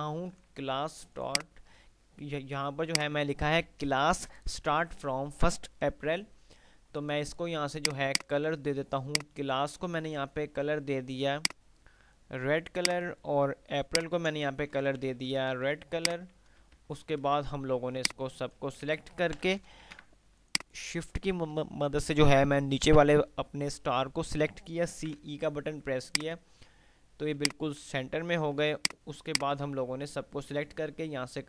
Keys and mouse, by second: 1.8 F2, 3.1 click, 3.4 F2, 7.9 click, 10.3 ctrl+q, 11.6 click, 14.1 ctrl+click, 14.9 ctrl+q, 16.3 click, 16.9 F3, 18.3-18.8 click, 19.1 g, 19.6 Delete, 19.9 ctrl+z, 20.8 shift+click, 25.0-25.9 typing, 26.3 click, 28.9-31.4 drag, 29.8-30.8 drag.